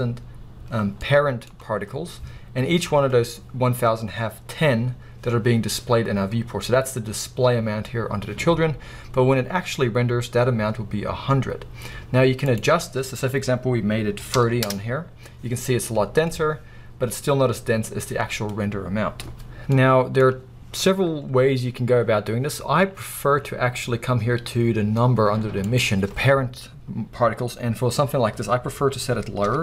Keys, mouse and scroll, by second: 1.0-2.9 middle drag, 12.2-13.7 middle drag, 13.8-14.8 middle drag, 14.8 Return, 14.8-15.9 drag, 15.7 scroll down 2, 15.9-19.0 middle drag, 16.4-17.1 scroll up 2, 17.1-17.9 scroll up 1, 17.9-18.8 scroll up 1, 18.8 scroll up 1, 19.7 middle click, 27.5-29.6 middle drag.